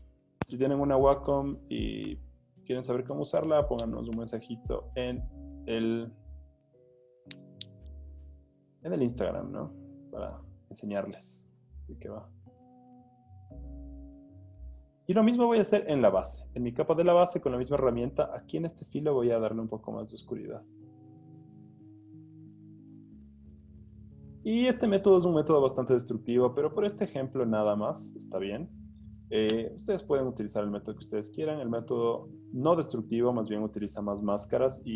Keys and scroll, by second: 0.9 o, 2.0 z, 3.8 o, 7.5 typing, 8.8 typing, 23.6 z, 25.1 o, 27.8 z, 29.7 o, 33.6 z.